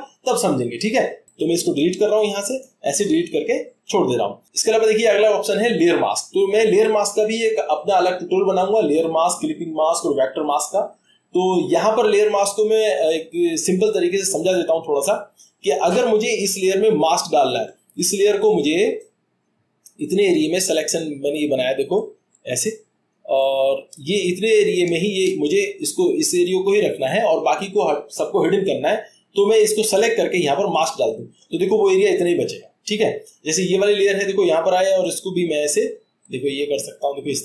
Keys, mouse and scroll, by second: 2.6 click, 20.2-21.3 drag, 22.4-25.0 drag, 28.8 click, 30.8-31.8 drag, 33.7-34.8 drag, 35.4-37.4 drag.